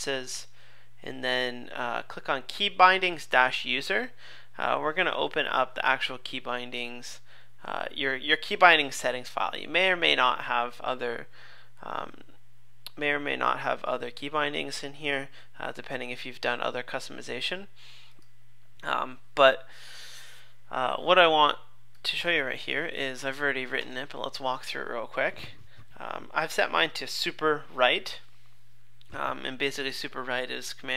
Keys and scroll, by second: 23.8 super+/.